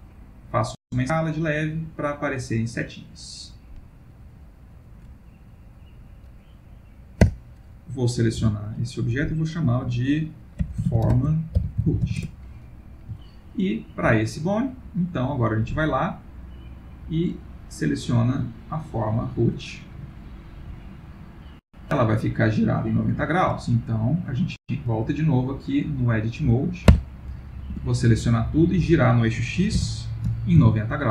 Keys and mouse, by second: 1.7 middle click, 7.2 Tab, 8.4 F2, 13.1 o, 13.2 ctrl+middle click, 14.8 click, 17.0 click, 20.0 middle click, 23.5 ctrl+middle click, 23.9 click, 24.8 middle click, 26.9 Tab, 27.7 a, 29.7 r.